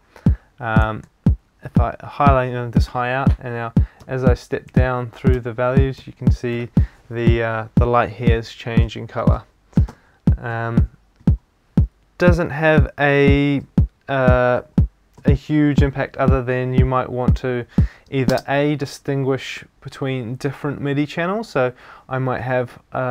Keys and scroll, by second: 4.0 Down.